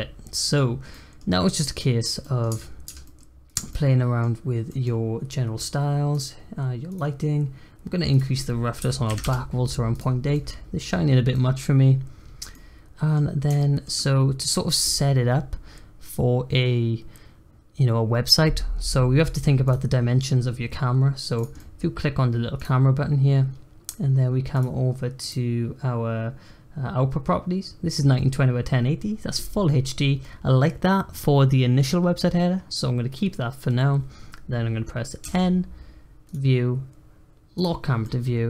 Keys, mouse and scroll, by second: 0.7 scroll up 2, 0.9 middle click, 1.3-1.6 scroll down 1, 1.6-2.5 middle drag, 2.5 Tab, 2.8 Tab, 3.0-3.5 middle drag, 3.5 click, 3.7-4.4 middle drag, 4.4 scroll up 1, 4.7-6.1 middle drag, 6.1 drag, 6.9 click, 8.1-10.0 drag, 10.1 scroll down 1, 10.3-11.0 middle drag, 11.0-11.3 scroll up 3, 11.3-12.3 middle drag, 12.3 scroll down 2, 12.5 middle click, 13.2-13.6 scroll up 2, 13.6-14.7 shift+middle drag, 14.7-17.6 scroll up 1, 19.7 click, 21.3 click, 21.5-22.5 middle drag, 22.5-23.0 drag, 23.0-23.3 scroll down 1, 23.3-24.5 scroll up 2, 24.5 click, 25.2 click, 35.2 n, 36.2 click, 37.5 click, 38.0-38.4 middle drag.